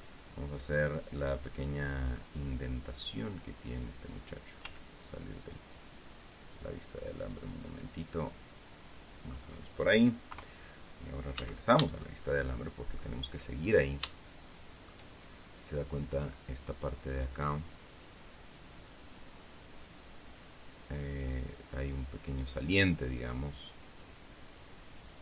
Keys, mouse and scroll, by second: 0.5-2.9 middle drag, 3.7-4.9 drag, 5.2 z, 6.3-10.1 drag, 10.8 KP_3, 11.9 z, 12.5-13.7 shift+middle drag, 14.7 shift+middle click, 19.9 right click, 20.4-22.0 drag, 24.6 click.